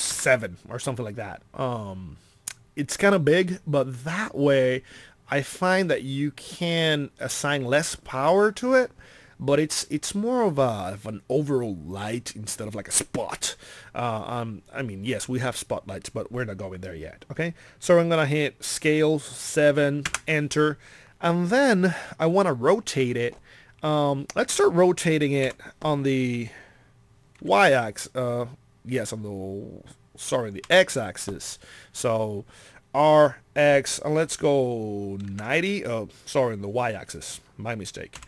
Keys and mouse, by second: 25.4 r.